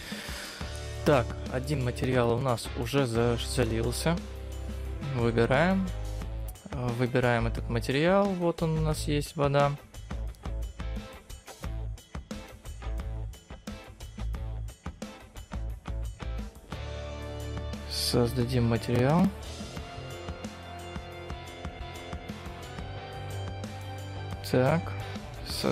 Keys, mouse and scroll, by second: 4.6 click, 7.5 click, 23.4 click, 25.1 click.